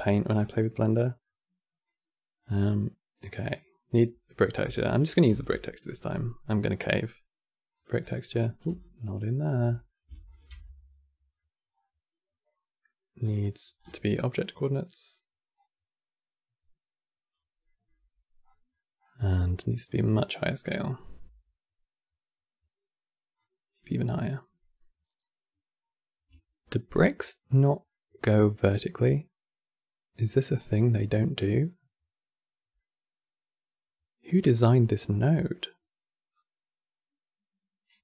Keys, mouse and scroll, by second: 0.2-1.6 middle drag, 1.6 click, 2.4-5.0 middle drag, 5.0 shift+a, 8.5 alt+click, 9.4 middle click, 10.0 ctrl+shift+click, 10.3-11.4 middle drag, 11.4-12.0 scroll up 4, 12.9 scroll down 3, 13.1-13.5 middle drag, 13.5-14.0 scroll down 6, 14.1-15.3 middle drag, 15.3 click, 17.4-18.2 middle drag, 18.2 scroll up 1, 18.4 middle click, 18.7-19.2 scroll up 7, 20.0-23.0 drag, 23.1-24.7 drag, 24.7-25.1 scroll up 3, 25.5 scroll down 1, 27.6-30.7 middle drag, 32.5-35.6 middle drag, 36.0 click.